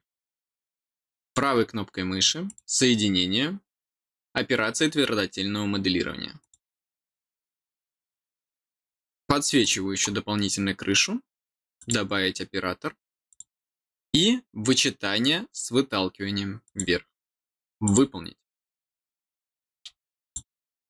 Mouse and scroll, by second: 1.1 right click, 2.4 click, 6.3 click, 9.5 click, 11.7 click, 13.2 click, 16.6 click, 17.8 click, 20.2 click.